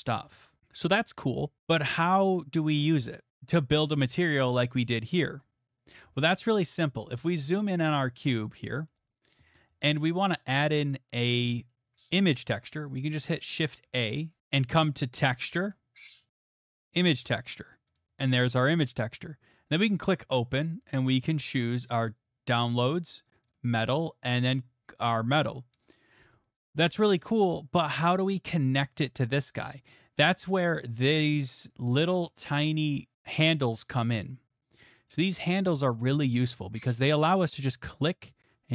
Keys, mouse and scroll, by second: 4.4-6.1 shift+middle click, 6.0 middle click, 6.0 middle click, 6.8 middle click, 6.9 middle click, 7.1 shift+middle click, 7.3 shift+middle click, 7.6 middle click, 8.0 shift+middle click, 8.9 shift+middle click, 12.0 middle click, 12.4 middle click, 12.5 shift+middle click, 12.8 middle click, 13.0 shift+middle click, 13.1 middle click, 13.8 a, 17.1 click, 18.0 click, 19.9 click, 21.9 click, 23.4 click, 23.5 click, 24.5 click, 26.4 click, 31.6-34.8 scroll, 35.1 middle click.